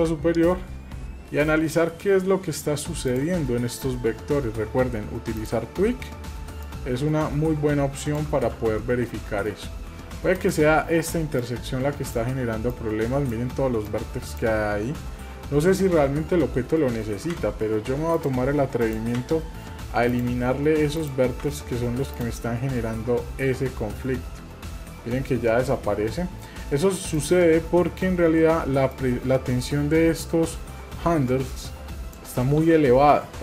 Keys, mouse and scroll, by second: 0.4-0.9 scroll up 2, 1.2 scroll up 4, 1.5-1.9 shift+middle drag, 2.0-2.7 shift+scroll up 3, 3.1 drag, 3.1 scroll up 1, 5.3 click, 6.6-8.2 drag, 8.5 ctrl+z, 9.0 shift+middle click, 10.3 click, 11.4 click, 12.7 click, 13.8 click, 15.2-16.0 scroll down 3, 15.8 scroll up 2, 17.3 Delete, 17.3-18.6 scroll up 1, 18.8 click, 19.2 Delete, 21.0 click, 21.4 Delete, 22.7-23.0 scroll down 2, 25.9 scroll down 4, 27.2 click, 28.9-32.2 drag, 33.1-33.4 scroll down 2.